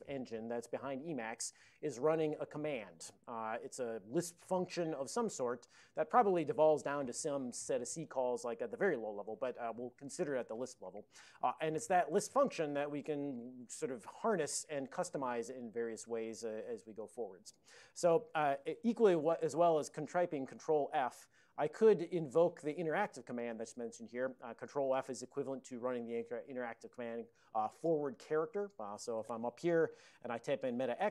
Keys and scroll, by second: 20.7 ctrl+f, 21.0 ctrl+f, 21.3 ctrl+f, 30.9 alt+x.